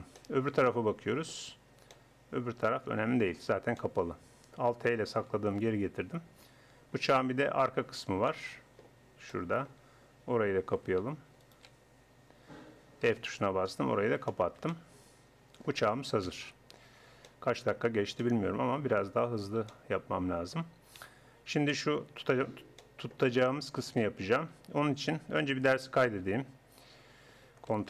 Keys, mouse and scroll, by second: 4.5 click, 5.6 alt+h, 5.6 Tab, 7.3 Tab, 9.5 middle click, 10.5 a, 13.1 f, 13.7 Tab, 16.3 KP_1, 17.0 scroll up 1, 25.4 middle click, 26.1 shift+s.